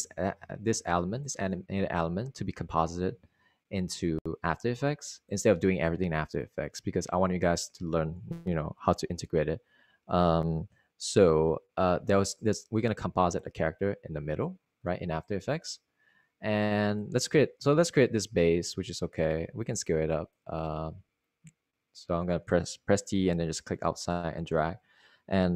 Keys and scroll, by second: 20.1 t, 21.8 super+z.